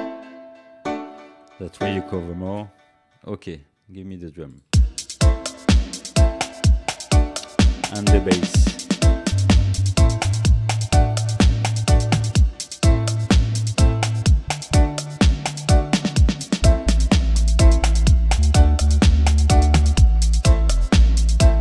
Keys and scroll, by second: 2.5 space, 4.6 space.